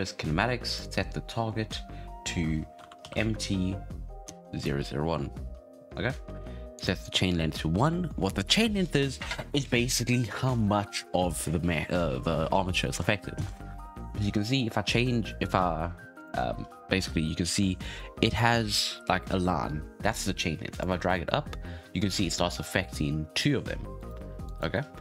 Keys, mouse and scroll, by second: 0.6-3.7 drag, 5.1-6.7 scroll down 6, 6.7-9.8 drag, 12.3-12.7 scroll up 6, 12.7-14.9 shift+middle drag, 14.9-19.2 drag, 20.6-23.7 drag, 23.9 right click, 24.4 right click.